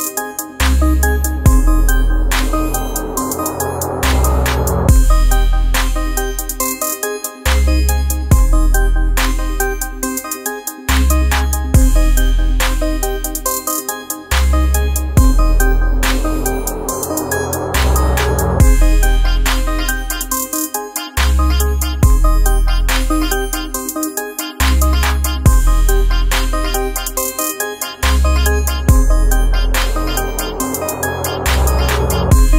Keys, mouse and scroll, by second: 2.6 ctrl+a, 3.9 typing, 5.2-9.0 typing, 13.4-19.7 drag, 22.1 click, 29.3-32.5 drag.